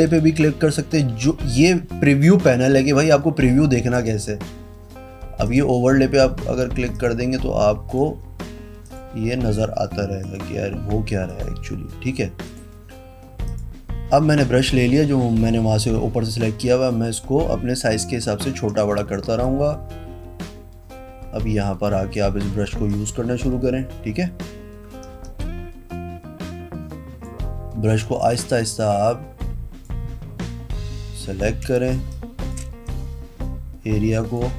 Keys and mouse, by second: 0.2 click, 4.1 click, 5.6 click, 7.1 click, 8.0 click, 9.0 click, 10.4 click, 11.4 click, 12.6 click, 13.6 click, 16.8 [, 17.3 [, 18.6 ], 18.7 ], 19.3 ], 19.6 click, 22.7-25.2 typing, 25.5 click, 28.0 ], 28.4 click, 31.8 space, 32.3 click, 33.0 click.